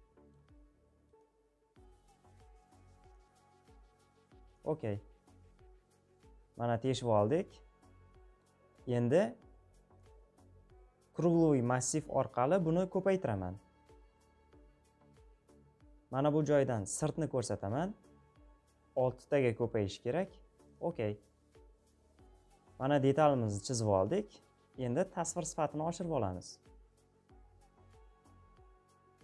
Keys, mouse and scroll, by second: 0.0-16.6 middle drag, 16.8-29.2 drag.